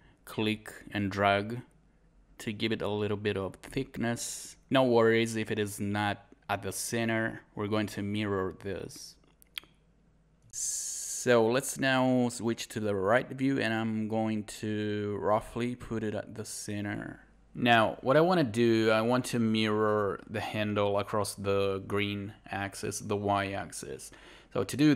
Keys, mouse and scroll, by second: 10.5-11.2 typing, 11.7 scroll up 1, 16.9 alt+click, 17.8 alt+right click, 18.1 alt+click.